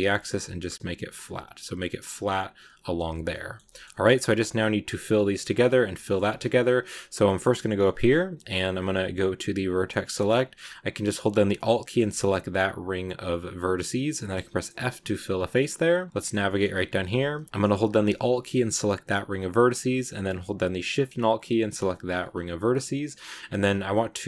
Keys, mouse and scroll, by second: 3.1 scroll down 1, 3.2-5.4 middle drag, 5.4 scroll up 2, 6.1-6.6 scroll up 2, 6.1 shift+middle click, 7.2-7.6 scroll down 1, 7.7 scroll up 2, 9.6 click, 11.6 alt+right click, 13.0 scroll down 1, 13.5-14.2 scroll up 3, 14.7 f, 14.9 scroll down 5, 15.5-16.5 middle drag, 16.5 scroll up 2, 17.5 a, 17.7 scroll down 1, 17.7 scroll up 1, 17.8 scroll down 1, 18.1-19.0 scroll up 1, 19.0 alt+right click, 21.8 alt+shift+right click, 22.2 scroll down 2.